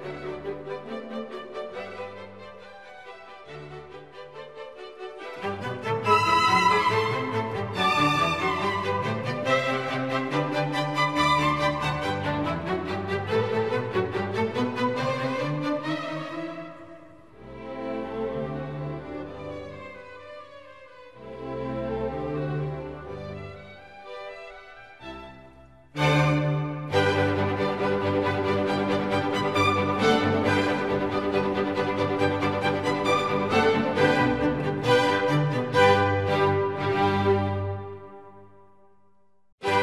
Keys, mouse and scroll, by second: 5.3 right click, 13.5 right click, 13.8 ctrl+t.